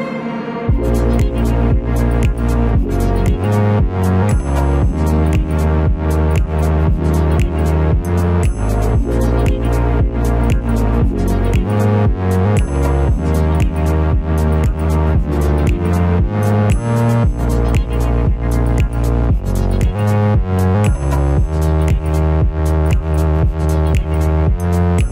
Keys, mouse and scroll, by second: 0.2 shift+middle click, 17.9 shift+click, 23.1 shift+click.